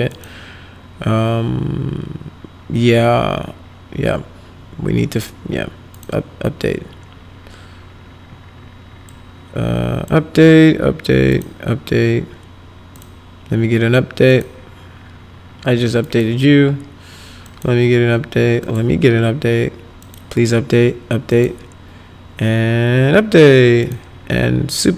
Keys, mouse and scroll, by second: 0.1 click, 5.9 click, 9.0 click, 11.3 click, 12.3-12.9 scroll up 2, 12.9 click, 14.3 click, 16.0 click, 17.4 click, 18.6 click, 20.0 click, 21.3 click, 23.8 click.